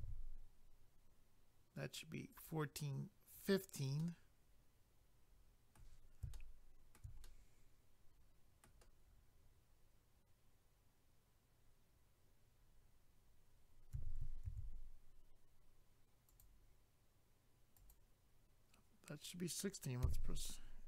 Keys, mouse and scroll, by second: 2.3 click, 2.4 click, 3.3 click, 3.5 click, 4.0 middle click, 6.3 shift+middle click, 7.2 middle click, 13.9 a, 14.5 ctrl+r, 16.3 click, 16.4 click, 17.7 click, 17.9 click, 20.0 a.